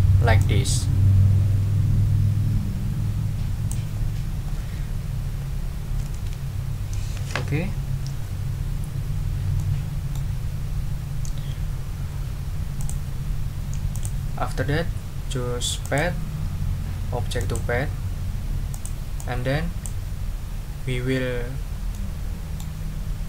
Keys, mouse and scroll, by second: 0.4 click, 1.7 click, 2.2-3.9 drag, 6.1 ctrl+z, 9.6 click, 12.8 click, 13.9 click, 15.8 click, 17.4 click, 18.7 click, 19.1-20.0 drag, 21.9-22.8 middle drag.